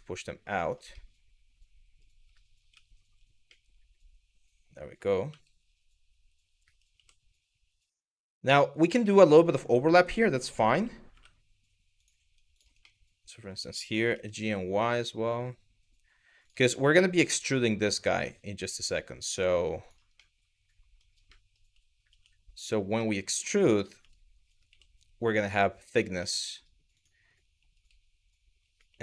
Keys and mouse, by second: 0.2 click, 0.5-1.7 middle drag, 2.3 z, 3.2-4.6 middle drag, 4.9 g, 6.5 y, 8.4 click, 8.7 shift+middle click, 9.3 middle click, 10.7 2, 11.6 click, 12.2 shift+click, 12.6 middle click, 13.7 g, 14.0 y, 16.0 click, 16.4 middle click, 17.0 middle click, 19.4 click, 19.9 middle click, 21.0 middle click, 21.7 1, 22.2 click, 22.7 middle click, 23.6 g, 25.9 middle click, 26.5 click, 28.5 y, 28.8 click.